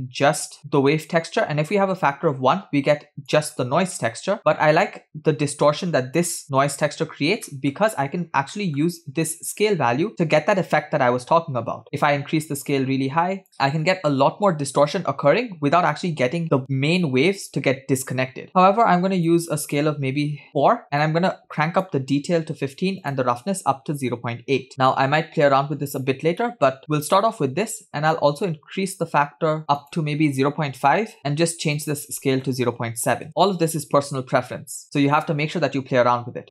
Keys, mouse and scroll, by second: 1.7-3.4 drag, 4.4-6.3 drag, 7.5 middle click, 7.8-8.6 scroll up 2, 8.6 middle click, 9.3-13.5 shift+drag, 18.5 click, 19.5-20.5 drag, 21.0-22.0 drag, 23.1-24.7 drag, 26.4 middle click, 28.2-31.2 drag, 31.2 middle click, 31.8-33.3 drag.